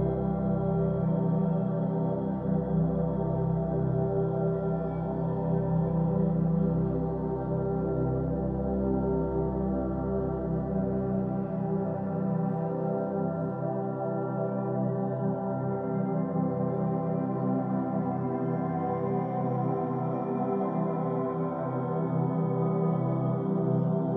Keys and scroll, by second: 0.0-1.0 typing, 7.4 BackSpace, 8.5-10.2 typing.